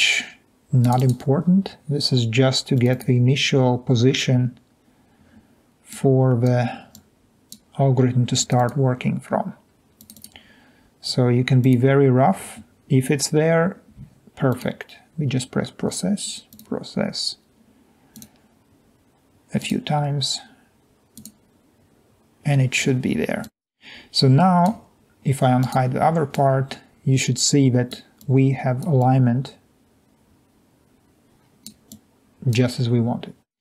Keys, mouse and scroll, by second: 11.6 click, 14.5 click, 16.5 click, 18.1 click, 19.6 click, 21.2 click, 27.6 middle drag, 27.8 drag, 31.9-32.5 drag.